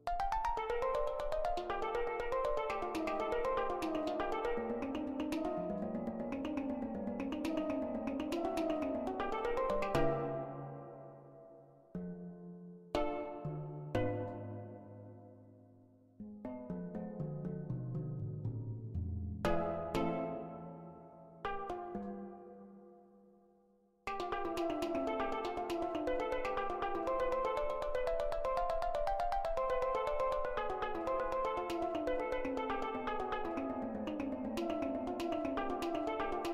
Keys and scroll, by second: 8.5 [, 9.4 ctrl+z, 15.0 ctrl+z, 20.8 [, 30.7 ctrl+z, 31.0 ctrl+z.